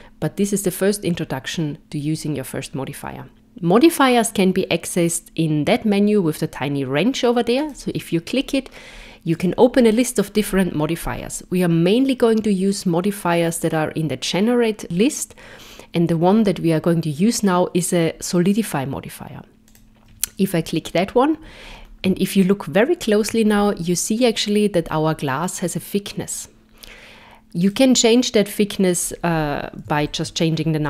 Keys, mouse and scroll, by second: 7.6 click, 9.3 click, 21.7 scroll up 3, 22.4 shift+middle click, 23.5 scroll up 3, 27.6 click.